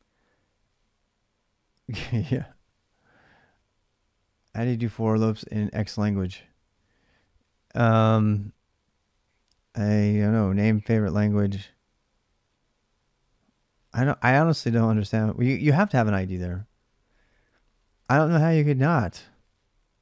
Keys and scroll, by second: 16.2 alt+shift+Tab.